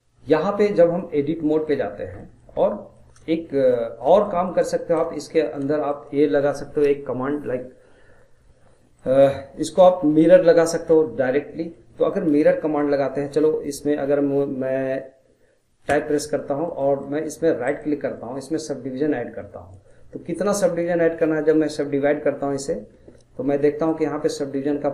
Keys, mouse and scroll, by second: 0.8-1.2 middle drag, 1.2 scroll up 2, 1.5-1.9 middle drag, 2.2-8.7 middle drag, 8.9-15.7 middle drag, 15.9 Tab, 16.3-17.7 middle drag, 17.7-20.6 right drag, 23.8-24.9 drag.